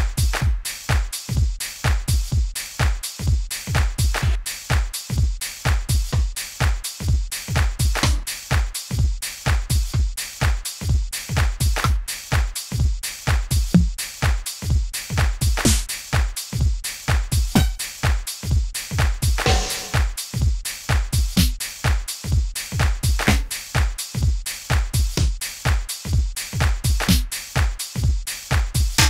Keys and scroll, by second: 23.6 Up.